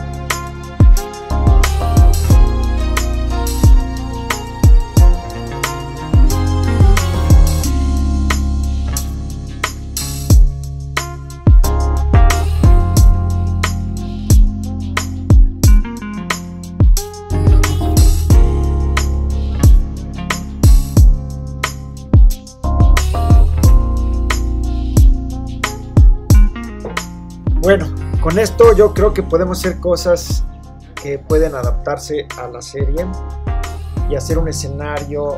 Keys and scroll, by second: 4.9 super+t, 7.9 Return, 8.8 Down, 9.9 Up, 14.4 Up, 32.9 Down.